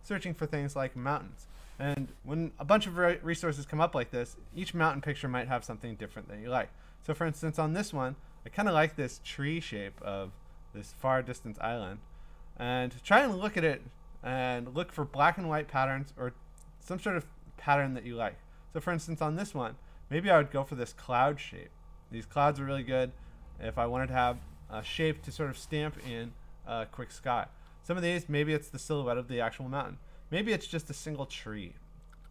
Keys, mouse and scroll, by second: 0.9 scroll down 3, 1.6-3.6 scroll down 16, 3.6 scroll, 3.7-4.1 scroll up 6, 4.5 scroll down 1, 6.1 scroll, 15.0-17.1 scroll down 16, 17.1-18.0 scroll up 15, 18.0-18.4 scroll down 3, 18.4 scroll, 22.5-24.0 scroll down 11, 24.0-26.2 middle drag, 24.0-24.3 scroll, 25.1-27.5 scroll, 27.6-28.3 scroll up 13, 31.0-31.8 scroll down 7.